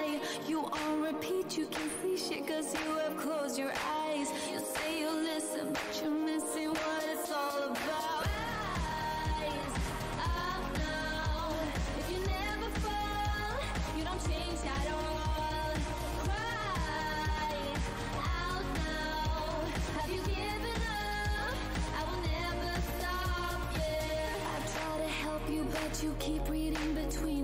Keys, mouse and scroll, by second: 3.2 scroll up 1, 6.6 shift+right click, 7.6 click, 8.9 w, 10.2 right click, 11.0 click, 11.1 w, 11.8 shift+click, 13.3 shift+right click, 14.2 alt+click, 15.5 click, 16.5 alt+click, 17.0 w, 17.6 click, 17.7 w, 18.5 click, 19.3 alt+click, 21.5 alt+click, 22.8 scroll down 1, 22.9 z, 24.1 shift+z, 24.7 alt+click, 26.5 right click, 26.9 scroll up 1, 27.0-27.4 typing.